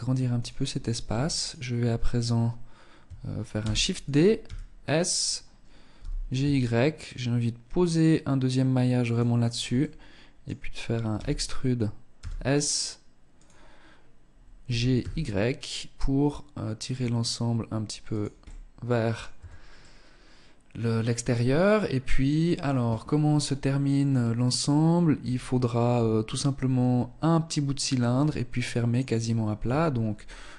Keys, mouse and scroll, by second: 0.5 alt+right click, 2.7 shift+d, 3.6 s, 5.1 g, 8.9 middle click, 10.3 e, 12.6 click, 13.8 g, 17.6 middle click, 18.5 Tab, 19.0 middle click, 28.8 Tab, 30.4 e.